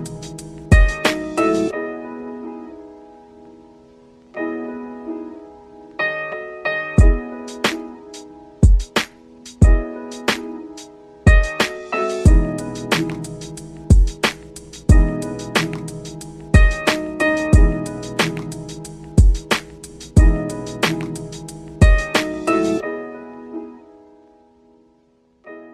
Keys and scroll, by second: 10.5 ctrl+q.